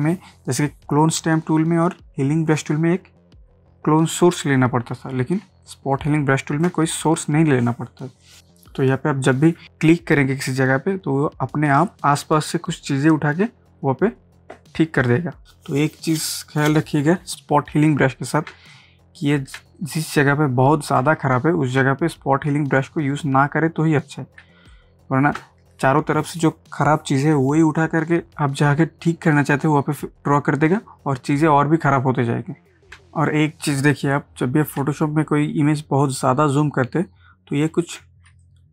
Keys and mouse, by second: 5.2 ctrl+space, 5.6 ctrl+click, 5.9 ctrl+space, 8.4 click, 9.6 ctrl+z, 11.7 click, 17.3 click, 18.5 space, 18.7 click, 19.0 space, 19.3 space, 19.8 ctrl+click, 21.0 ctrl+space, 21.8 space, 22.1 click, 22.3 space, 22.5 space, 24.4 ctrl+space, 24.7 ctrl+click, 25.5 ctrl+space, 33.0 space, 34.8 ctrl+space, 36.1 ctrl+click, 36.3 ctrl+space, 37.6 ctrl+space, 38.3 ctrl+space, 38.4 ctrl+click.